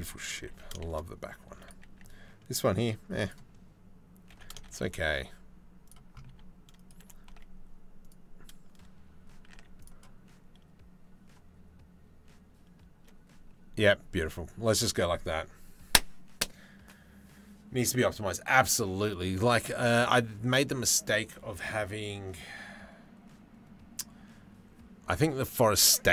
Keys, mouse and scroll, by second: 0.1 g, 2.8 click, 3.9 g, 5.9 r, 6.6 r, 9.1 z, 16.2-26.1 drag.